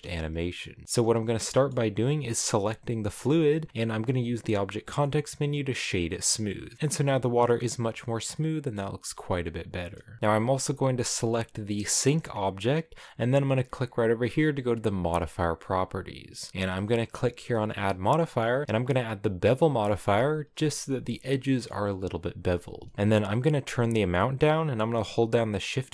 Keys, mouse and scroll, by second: 0.0-0.8 scroll up 1, 0.8-1.5 scroll up 3, 1.5-3.0 middle drag, 3.0-3.9 scroll up 3, 6.4 w, 6.7 space, 7.4-7.8 scroll down 1, 7.8 middle click, 8.2 scroll down 1, 8.3-10.2 middle drag, 10.2-11.7 scroll down 2, 11.7 right click, 12.2 right click, 15.5-20.3 drag, 20.3 shift+middle click, 20.5-21.1 scroll up 2, 21.4 shift+middle click, 21.7-22.2 scroll up 1, 25.4-25.9 shift+drag.